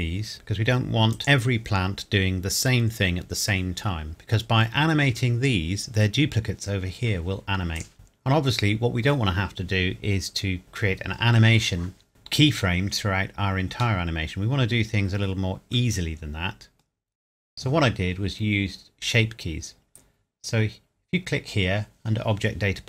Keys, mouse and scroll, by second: 1.1 click, 4.1 click, 7.8 click, 7.9 middle click, 14.0 middle click.